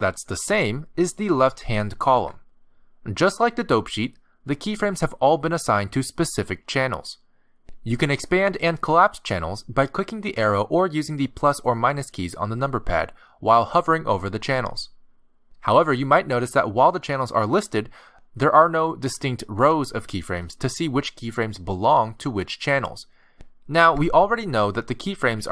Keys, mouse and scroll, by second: 8.0 click, 9.4 click, 10.5 click, 11.9 click, 12.5 click, 12.9 click, 22.2 a, 23.3-24.5 scroll down 2, 24.5 scroll down 2, 24.6 middle click.